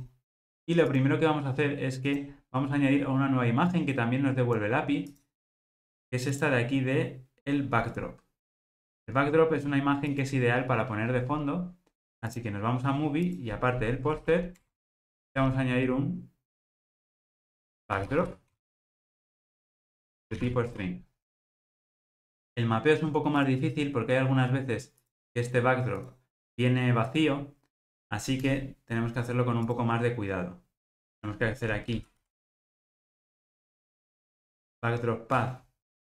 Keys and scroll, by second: 23.4 super+c, 35.4 Return.